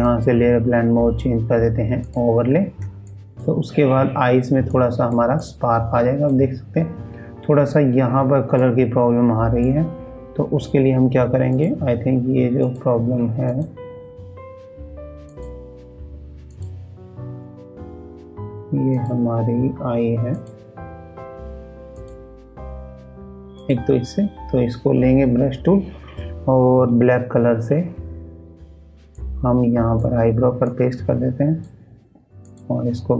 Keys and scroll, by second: 2.8 ctrl+space.